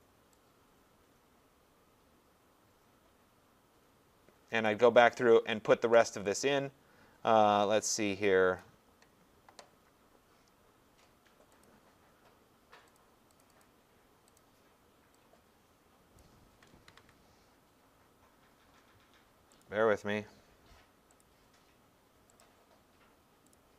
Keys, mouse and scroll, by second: 4.7 click, 8.6 click, 11.6 click, 13.0 click, 13.4 click, 13.6 click, 14.4 click, 16.2 click, 16.9 ctrl+c, 19.6 click, 21.2 click, 22.4 click, 23.5 click.